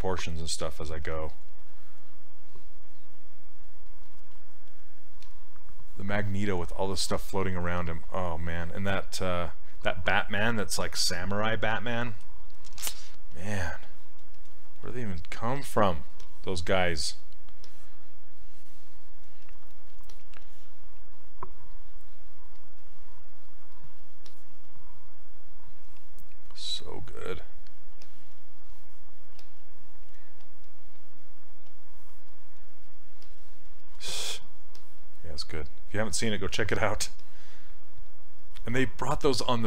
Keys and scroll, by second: 29.4 s.